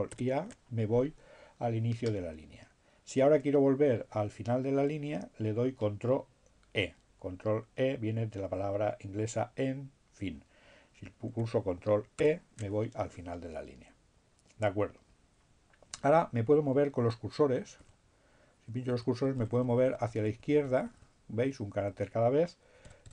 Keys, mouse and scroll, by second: 0.1 ctrl+a, 9.5 ctrl+e, 17.5 Left, 17.8 Left, 22.1 Right.